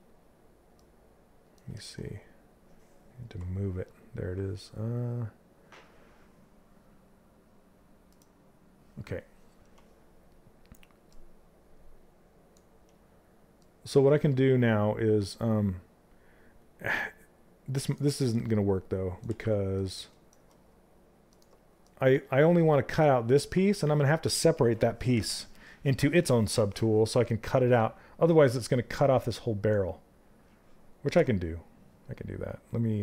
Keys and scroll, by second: 18.7 ctrl+z.